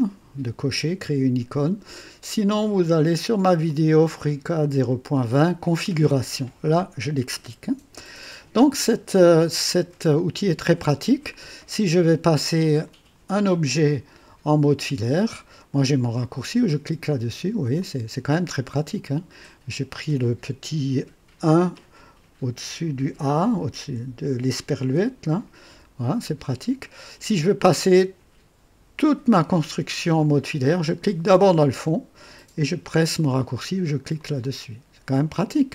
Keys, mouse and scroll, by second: 2.6-3.8 drag, 4.5 scroll down 2, 4.9-5.6 right drag, 8.9-10.2 drag, 10.2 right click, 12.8 click, 17.1 click, 17.8 click, 18.5 click, 25.7-26.6 typing, 31.2 click, 34.2 click, 35.4 click.